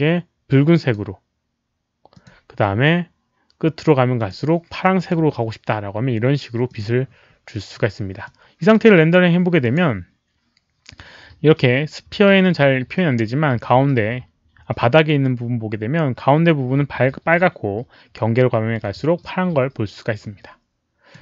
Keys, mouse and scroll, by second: 0.7 click, 2.1 click, 4.1 click, 4.9 click, 6.6 click, 8.2 click, 9.5 click, 19.1-21.1 drag.